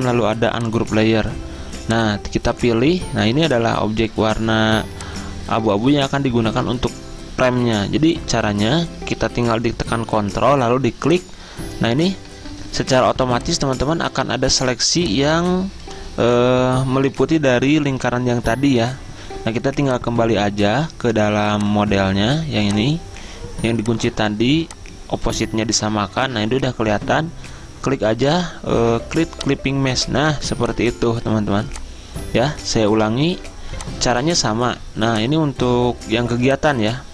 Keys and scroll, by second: 6.6 ctrl+z, 12.7 Return, 14.8 z, 30.5 z, 33.1 v.